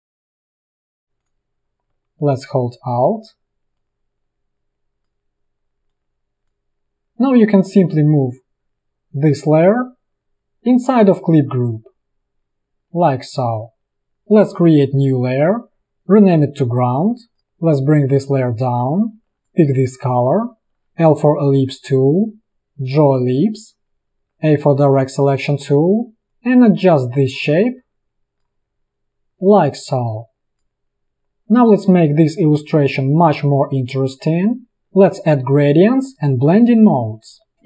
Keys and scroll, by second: 19.4 i, 20.9 l, 24.3 a, 37.4 space.